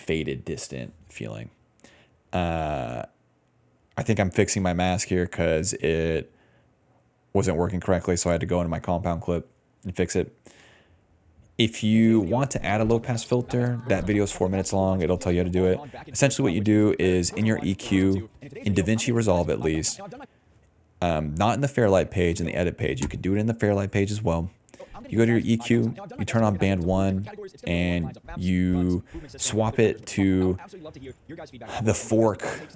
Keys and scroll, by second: 10.7 ctrl+s, 11.7 ctrl+s, 11.8 space, 12.6 s, 13.7 d, 14.4 d, 14.9 s, 16.0-20.7 typing, 22.7 d, 23.7-28.0 typing, 29.2-31.7 typing.